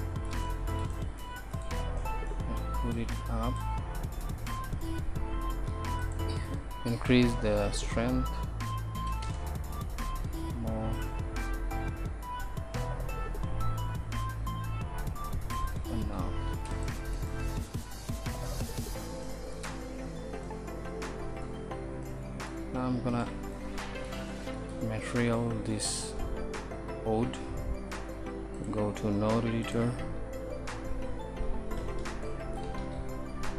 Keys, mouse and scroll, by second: 3.0 middle click, 3.1-6.1 drag, 3.1-3.7 right drag, 6.1 middle click, 11.0 middle click, 16.5 ctrl+s, 16.5-17.4 middle drag, 26.4 middle click, 31.8 n, 32.8 shift+a.